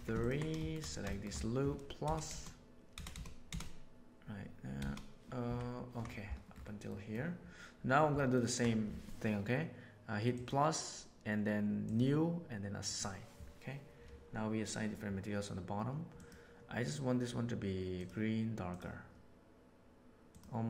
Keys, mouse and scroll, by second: 0.5 shift+middle click, 1.0 shift+middle click, 2.0 ctrl+KP_Add, 2.2 ctrl+KP_Add, 3.1 ctrl+KP_Add, 3.4 ctrl+KP_Add, 4.7 ctrl+KP_Add, 5.4 ctrl+KP_Subtract, 6.5 middle click, 8.1 ctrl+middle click, 8.4 ctrl+click, 10.3 click, 16.1 click.